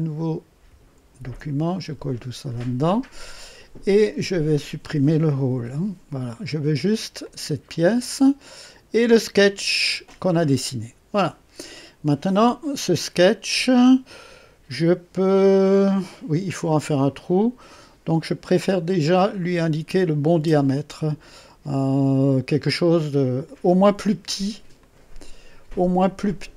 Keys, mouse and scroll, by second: 1.1 ctrl+v, 2.2-2.5 ctrl+scroll down 3, 4.5 click, 5.5 Delete, 6.7 scroll down 2, 7.2 click, 9.1 click, 18.6 click, 23.2 click, 24.7 click.